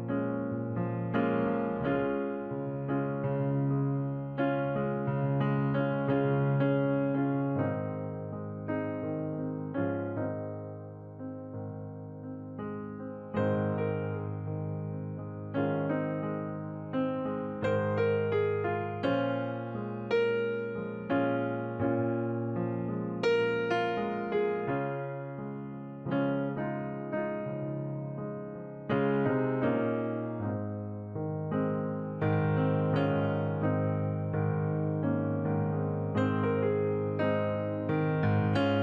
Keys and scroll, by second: 35.6 ctrl+j, 36.4 ctrl+t.